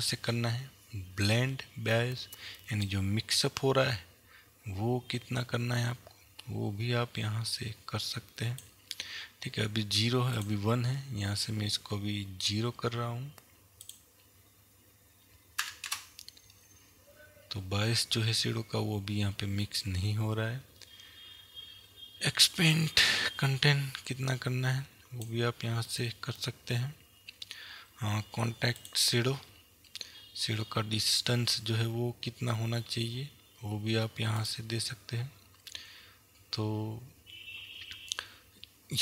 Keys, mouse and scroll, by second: 3.7-30.7 drag, 17.1 KP_Enter, 28.5-30.1 scroll down 1, 31.9-34.8 scroll down 1, 34.8 click.